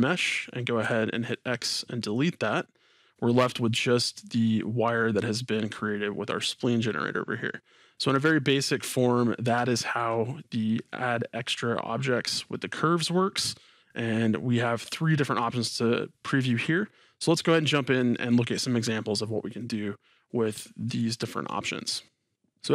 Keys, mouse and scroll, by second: 0.8 x, 2.9-14.8 middle drag, 7.1-7.6 scroll down 2, 10.2-10.8 scroll up 2, 19.6-22.6 middle drag.